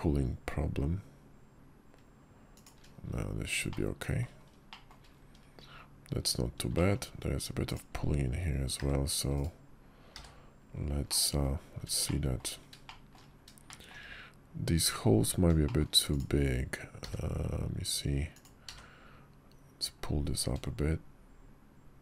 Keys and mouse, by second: 3.5 middle click, 4.6 shift+middle drag, 6.6 shift+middle click, 7.5 click, 8.7 w, 9.2 click, 10.0 w, 11.0 click, 11.9-12.2 shift+drag, 12.7 shift+middle drag, 13.5 shift+middle click, 15.5 shift+middle click, 16.0 click, 18.3 d.